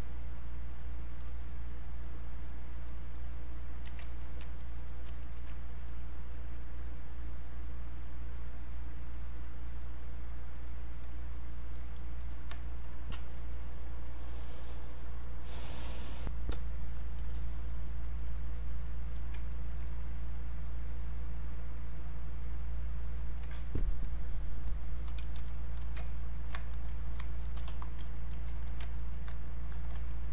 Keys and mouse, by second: 1.2 click, 4.1 ctrl+right click, 4.6 click, 5.2 ctrl+right click, 5.9 click, 10.9-14.9 drag, 17.3 click, 19.5 ctrl+right click, 19.8 ctrl+click, 26.1 ctrl+right click, 26.7 alt+click, 27.7 r, 27.9 click, 28.6 alt+click, 28.9 ctrl+right click, 29.7 alt+click, 30.1 ctrl+right click.